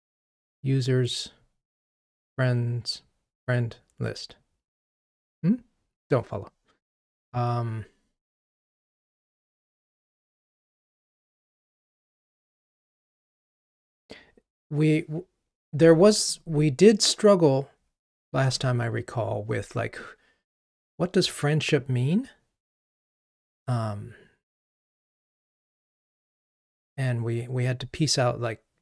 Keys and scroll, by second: 18.4 ctrl+Tab.